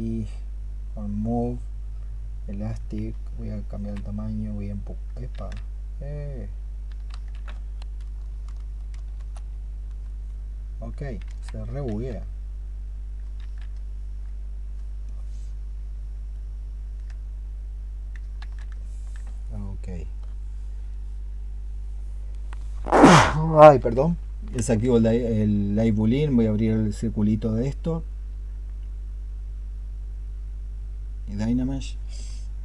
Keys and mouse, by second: 2.9-3.7 s, 5.2 ctrl+z, 6.9 ctrl+z, 7.8-8.5 ', 9.0 ', 11.7 ctrl+z, 13.2 ctrl+z, 13.7 ctrl+click, 14.9 ctrl+click, 16.2 ctrl+click, 18.5 ctrl+z, 18.7 ctrl+click.